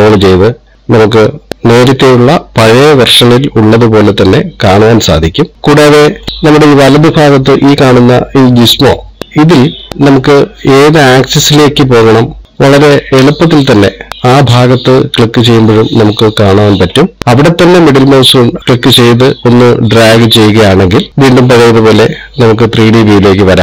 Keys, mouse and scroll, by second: 11.9 click, 12.9 click, 14.1 click, 18.2 middle click, 19.0 click.